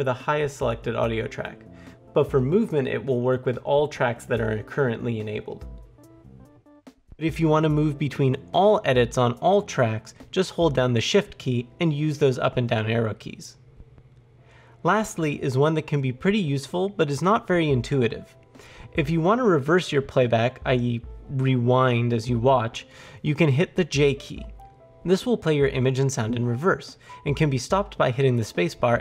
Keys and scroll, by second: 23.9 j.